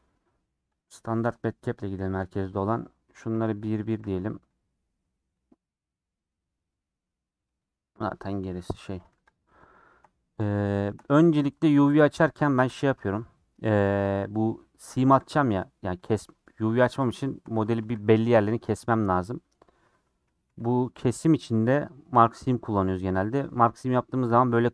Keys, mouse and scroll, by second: 9.0 scroll down 5, 9.2 click, 9.5 scroll up 4, 9.8 shift+middle click, 10.1 scroll down 3, 10.3 middle click, 10.6 scroll up 1, 10.7-12.0 shift+middle drag, 12.0 click, 12.7 /, 13.0 Tab, 13.1-14.9 middle drag, 14.9 3, 15.2 click, 15.5 2, 16.9 middle click, 17.5 3, 17.9-19.5 shift+drag, 19.5 right click, 20.5 2, 21.3-23.5 right drag, 23.5 middle click, 23.9 scroll up 4.